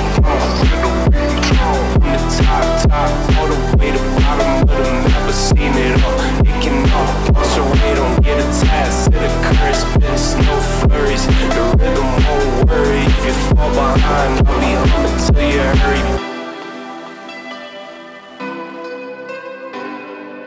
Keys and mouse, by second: 0.6 z, 1.5 middle click, 2.7 click, 3.3 click, 4.0 click, 5.4 click, 6.1-7.2 drag, 7.4 click, 7.9-9.0 drag, 9.3 click, 9.7 click, 11.2 click, 11.7 click, 12.7-13.8 drag, 14.5 click, 14.7 g, 17.8 click, 18.1 click, 18.3 g, 19.4 click.